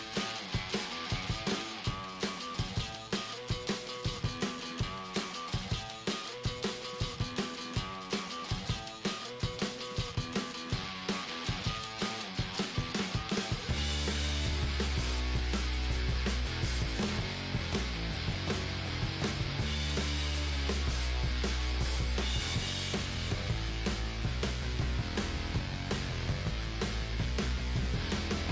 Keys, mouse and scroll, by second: 3.8 right click, 4.0-5.5 drag, 4.6 g, 5.5 middle click, 7.0-8.6 middle drag, 7.4 g, 9.2-11.0 right drag, 9.6 g, 11.6 right click, 11.8-13.0 middle drag, 11.9 g, 13.0-15.0 right drag, 13.5 g, 14.5 g, 15.0-18.0 middle drag, 15.5 right click, 18.0-19.7 right drag, 18.1-26.4 middle drag, 18.5 g, 20.9-22.6 right drag, 22.1 g, 23.8-25.9 right drag, 24.7 g, 26.8-28.5 right drag, 27.1 g.